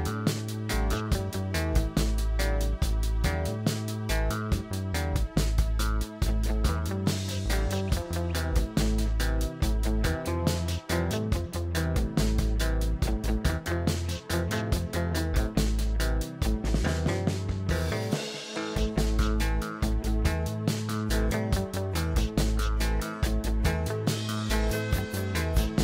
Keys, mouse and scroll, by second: 0.3 scroll up 1, 0.6-1.1 shift+middle drag, 1.1 shift+scroll up 1, 1.3 s, 1.9 click, 2.5 click, 3.7-4.2 scroll down 2, 4.2-5.3 middle drag, 5.3 Tab, 5.8 click, 7.8 s, 11.5-13.2 middle drag, 13.2 click, 14.8 s, 16.5-18.0 middle drag, 18.0 shift+click, 19.1 x, 21.3-23.9 middle drag, 24.0 click, 25.3 ctrl+r.